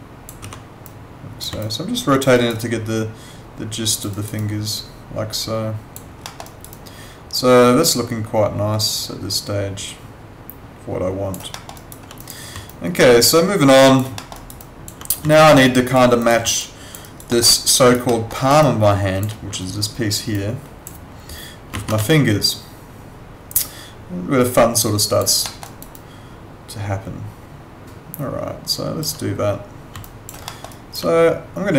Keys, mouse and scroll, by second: 0.4 w, 0.8 click, 1.6 alt+click, 2.3 alt+right click, 2.6 alt+click, 4.1 alt+right click, 4.4 alt+click, 6.2 alt+middle click, 6.4 alt+right click, 6.7 alt+click, 11.5 alt+middle click, 11.8 alt+right click, 12.2 click, 12.7 alt+click, 14.2 alt+middle click, 14.4 alt+right click, 14.6 alt+click, 15.3 alt+click, 16.2 click, 16.6 alt+click, 17.0 alt+right click, 17.3 alt+middle click, 17.6 alt+click, 17.7 alt+right click, 18.0 alt+middle click, 18.3 alt+right click, 18.6 alt+click, 21.7 ctrl+z, 22.1 alt+click, 25.4 alt+middle click, 25.6 alt+right click, 25.9 alt+click, 30.0 alt+click, 30.4 alt+middle click, 30.7 alt+right click.